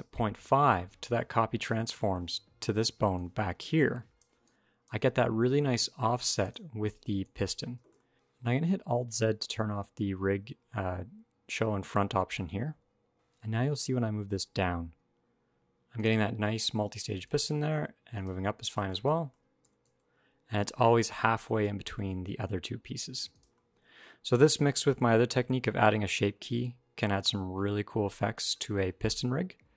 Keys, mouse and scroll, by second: 1.6 shift+middle click, 1.7 middle click, 2.6 d, 3.0 click, 4.0 d, 4.2 click, 4.2 d, 4.7 d, 5.5 click, 6.2 click, 7.0 alt+g, 7.8 shift+middle click, 8.2 click, 12.4 alt+z, 13.2 click, 13.6 g, 16.0 middle click, 16.4 scroll up 2, 16.8 g, 18.2-18.7 scroll down 8, 18.7 shift+middle click, 18.9 scroll up 1, 19.0 middle click, 19.1 scroll down 1, 19.2 scroll up 1, 19.4 g, 23.3 middle click, 24.0-24.6 scroll down 1, 24.6 g, 28.4 alt+r, 28.5 alt+g, 29.2 KP_1, 29.3 KP_5, 29.6 KP_3.